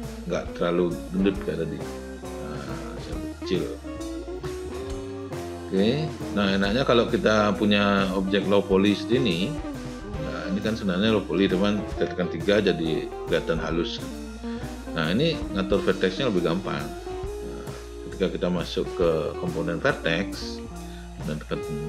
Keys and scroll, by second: 8.9 space, 21.3 w.